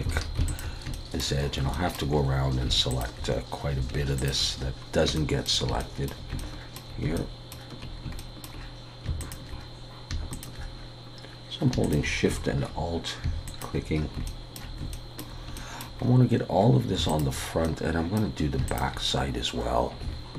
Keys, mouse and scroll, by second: 0.1 alt+a, 0.5 alt+shift+click, 0.9 shift+middle click, 1.4-2.3 scroll up 4, 1.7 shift+middle click, 2.9 alt+shift+click, 4.7-5.1 scroll down 2, 5.1 shift+middle click, 7.2 shift+middle click, 8.1 shift+scroll up 1, 8.2 shift+middle click, 9.2 alt+shift+click, 10.5 alt+shift+click, 12.3-13.0 shift+scroll down 3, 13.5 alt+shift+click, 13.9-14.3 scroll down 3, 14.3 shift+middle click, 14.9 shift+scroll up 1, 14.9 shift+middle click, 16.0 scroll up 3, 17.1 alt+shift+click, 17.6 middle click, 18.7 alt+shift+click.